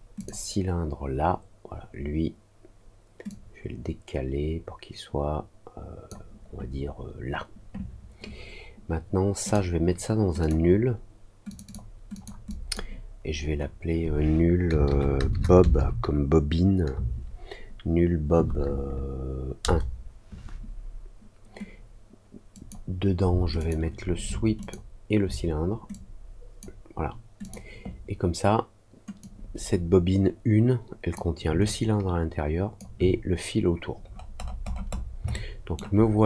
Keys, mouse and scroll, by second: 0.1 click, 3.2-6.0 drag, 9.4 click, 10.3 click, 11.4 click, 11.6 click, 12.1 click, 12.4 click, 22.5 click, 23.5 shift+click, 24.5 ctrl+click, 25.8 click, 27.3 click, 29.1-31.1 drag, 31.6-32.7 alt+drag, 34.0-35.0 scroll down 4, 35.2 alt+middle click.